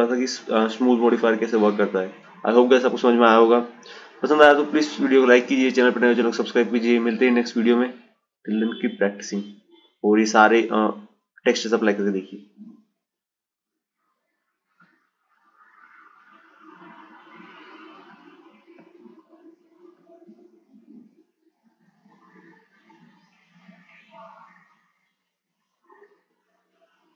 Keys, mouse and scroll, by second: 12.0 click, 12.8-15.8 drag, 16.2 click, 18.5 click, 20.0 click.